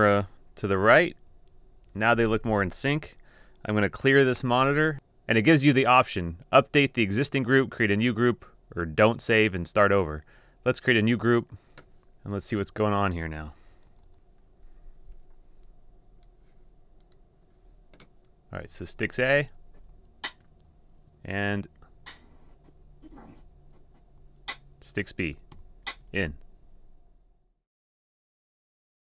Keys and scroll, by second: 1.3 typing, 2.3 Tab, 4.6 5, 12.1 5, 13.8 super+], 13.9 super+], 14.0 super+], 14.2 super+], 18.7 shift+Right, 19.0 shift+Right, 19.4 shift+Right, 19.9 shift+Right, 20.6 Down, 21.4 shift+Right, 22.3 shift+Right, 22.8 shift+Right, 23.4 shift+Right, 24.2 shift+Right, 24.7 shift+Right, 25.5 shift+Right.